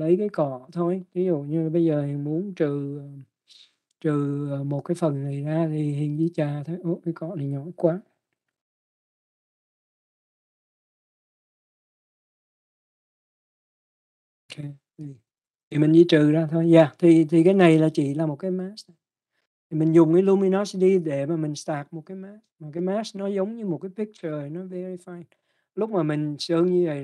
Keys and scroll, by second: 3.7 x, 9.6 ].